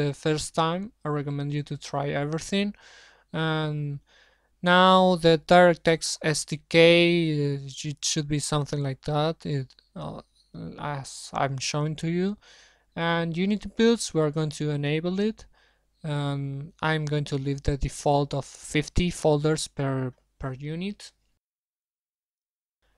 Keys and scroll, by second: 9.8-11.6 typing, 15.0 shift+Home, 19.7 shift+Home, 19.7 shift+Delete.